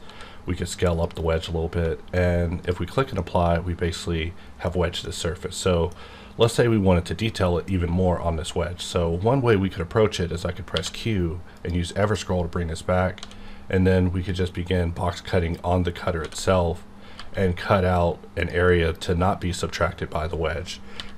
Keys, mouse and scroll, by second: 0.0 s, 0.9 click, 2.6 click, 3.1-10.0 middle drag, 10.6 q, 11.5 click, 13.1 d, 14.2-16.2 drag, 16.2-17.1 typing, 18.4 click, 20.9 b.